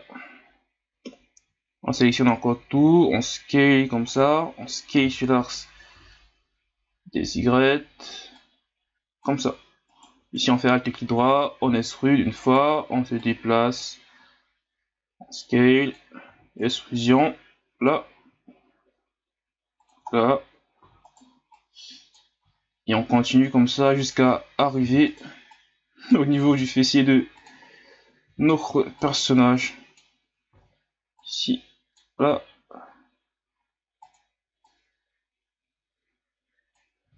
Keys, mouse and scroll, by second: 1.4 a, 2.7 s, 5.0 s, 8.4-9.9 drag, 9.9 alt+right click, 10.7 scroll down 4, 11.6 e, 13.2 click, 14.1 s, 16.3 e, 17.2 click, 18.1 s, 20.1-20.8 scroll down 1, 20.8 e, 21.5 click, 22.4 s, 24.3-24.8 scroll down 4, 24.8 e, 25.6 click, 26.4 s, 27.6-28.2 scroll down 4, 28.2 e, 29.0 click, 30.5 ctrl+z, 31.2-32.3 drag, 32.3 s, 34.6-37.0 drag, 37.0 e.